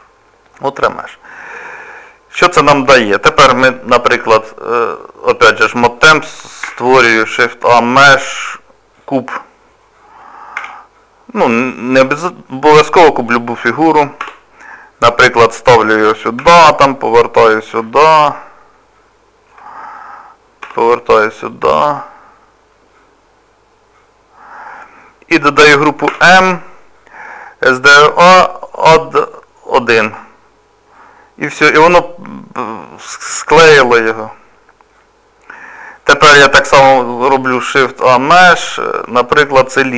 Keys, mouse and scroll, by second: 0.5 middle click, 1.6-2.0 scroll up 1, 2.0 middle click, 4.8 click, 6.6 shift+a, 10.6 s, 11.8 middle click, 14.2 g, 16.4 r, 17.4 middle click, 20.6 g, 22.9 middle click, 26.1 m, 31.0 middle click, 36.8 shift+a.